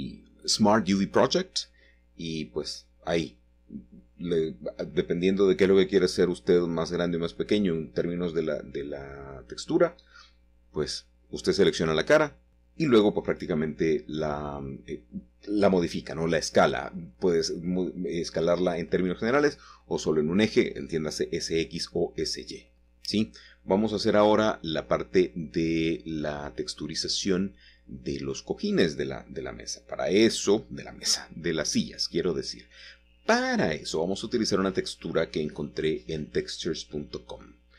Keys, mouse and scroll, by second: 0.0 ctrl+z, 0.9-2.7 shift+drag, 3.0 ctrl+l, 3.3-3.9 typing, 5.3 Tab, 5.8-6.6 scroll down 1, 6.1 typing, 6.6-7.8 middle drag, 7.5-8.4 scroll down 2, 8.4-8.9 scroll up 2, 8.9 shift+middle click, 9.9 ctrl+s, 11.0 click, 12.3-13.3 drag, 14.8 click, 16.4 click, 17.3-18.0 scroll up 2, 18.0 shift+middle click, 21.3 click, 21.9 click, 22.2-23.2 middle drag, 24.8 Tab, 26.7 typing, 30.3 click, 32.2 a, 36.1 click.